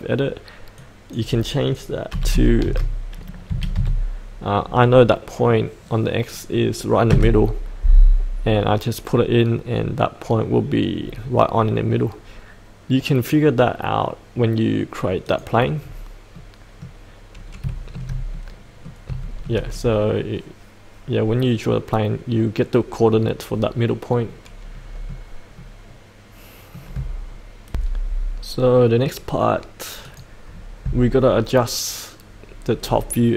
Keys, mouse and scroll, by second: 2.1 KP_8, 3.5 KP_Decimal, 3.7 KP_5, 15.2 click, 15.7-16.3 scroll up 1, 16.3 middle click, 17.0-17.6 scroll up 1, 17.7-19.0 shift+middle drag, 19.2-26.9 shift+middle drag, 27.7 F8, 30.0 click, 32.7-33.3 scroll up 1.